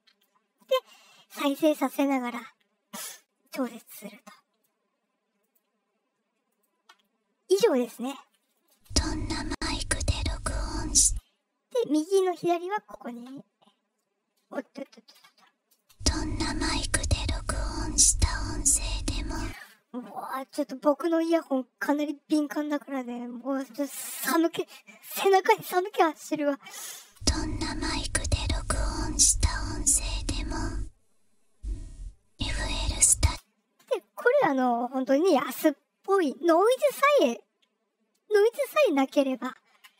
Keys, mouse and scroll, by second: 0.5 click, 4.1-4.5 drag, 5.3 click, 6.4 click, 8.5 click, 8.7 space, 10.4 click, 10.9 space, 12.0 click, 12.5 click, 15.7 space, 15.7-19.0 drag, 19.3 space, 26.9 space, 27.5-32.8 drag, 33.2 space, 39.7 KP_Enter.